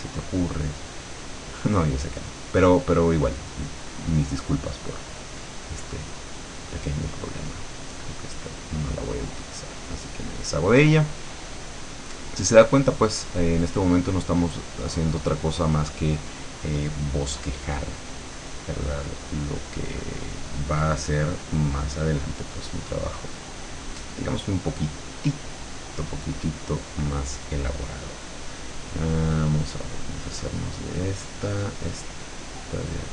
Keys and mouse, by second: 0.2 click, 1.3-3.0 drag, 3.1-4.4 drag, 5.3 click, 7.4 click, 8.1-9.1 drag, 11.5-13.7 drag, 21.0 click, 22.9-26.7 drag, 28.8-30.0 drag.